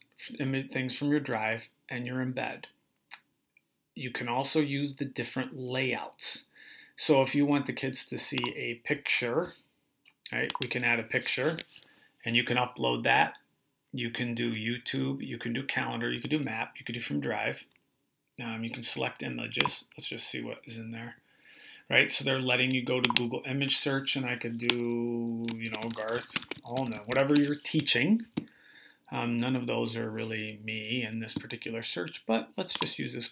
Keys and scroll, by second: 25.3-27.4 typing.